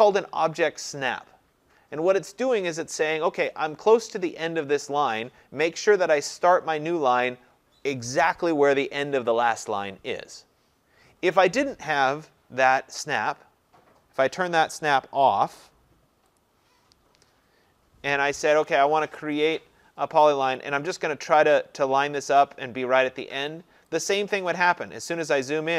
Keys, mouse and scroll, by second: 16.4 click, 18.7 Escape, 19.5 click, 24.1 click, 24.5-25.7 scroll.